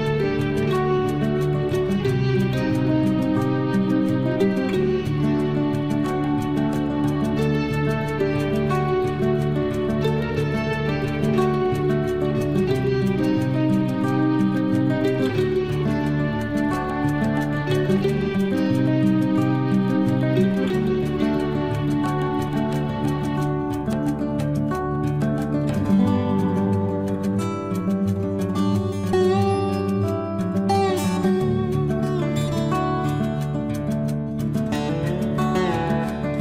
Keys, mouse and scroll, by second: 0.9-2.0 scroll up 1, 2.0 scroll up 1, 2.1 click, 6.2 scroll down 1, 8.0-9.0 scroll up 1, 9.0 click, 9.4 scroll down 1, 11.1 scroll up 1, 12.9 click, 14.7-15.2 scroll down 1, 16.3 scroll up 1, 17.3 click, 17.6 scroll down 1, 19.4 scroll up 1, 20.4 click, 20.8 scroll down 1, 22.0 scroll up 1, 23.2 click, 25.1 scroll down 1, 25.6 scroll up 1, 26.4 click, 26.7 scroll down 1, 27.4 scroll up 1, 29.1 click, 29.4 scroll down 1, 30.9-31.9 scroll up 1, 35.9 click.